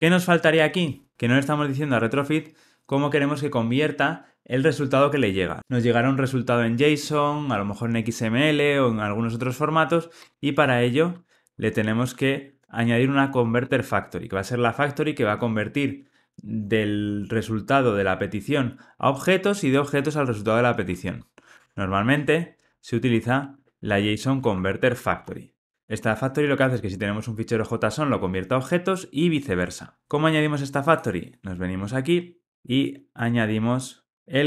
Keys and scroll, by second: 13.5 Return, 21.5 Tab, 23.3 alt+Return.